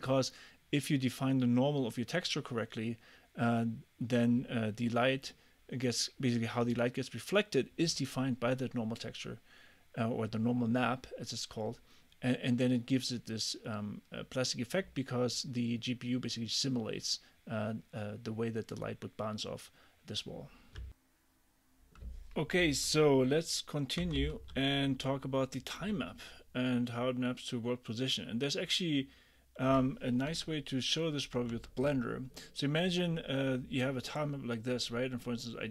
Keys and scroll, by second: 24.2 j, 30.3 super+Tab.